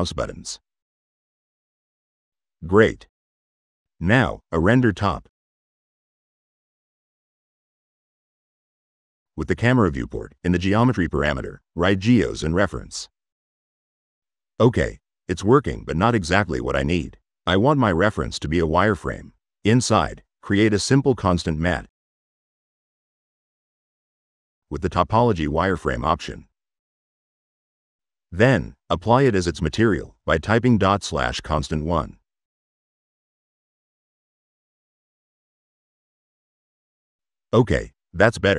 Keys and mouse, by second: 0.2 click, 2.8 drag, 3.2 click, 4.1 click, 4.2-5.5 typing, 5.5 drag, 6.0 click, 7.4 click, 8.1 click, 9.7 click, 10.8 click, 17.8 click, 18.0 Tab, 18.4-19.7 typing, 20.1 click, 21.0 click, 21.9 click, 24.0 click, 24.9 click, 25.7 click, 27.9 click, 29.6 click, 30.0 click, 34.7 click, 35.0 click, 35.5 middle click, 35.9 right click, 38.4 middle click.